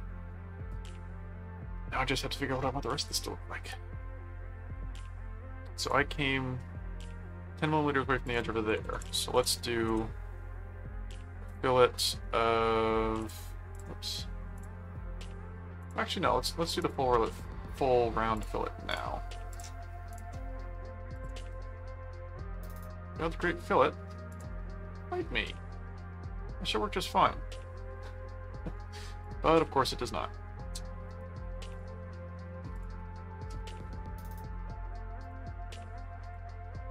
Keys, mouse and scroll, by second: 3.0 middle click, 4.0-5.1 middle drag, 5.8 click, 6.6 middle click, 8.2 click, 8.5-9.9 typing, 11.5 click, 13.2 click, 14.5 click, 15.8 click, 16.8 click, 18.3-19.4 drag, 19.5 click, 20.2 click, 20.4 middle click, 21.1 click, 21.3 right click, 24.3 click, 25.0 middle click, 29.2 click, 31.0 right click, 31.7 click, 32.7 click, 35.2 click, 36.3 click.